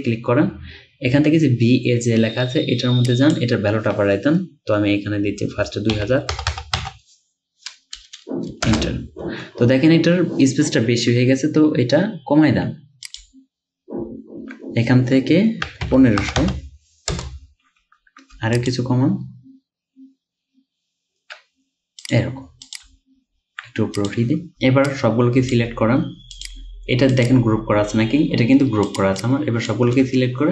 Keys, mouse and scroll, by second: 6.0-8.0 typing, 8.7 Return, 13.2 Down, 15.5-17.1 typing, 18.4 Down, 22.9 Up, 29.2 double click.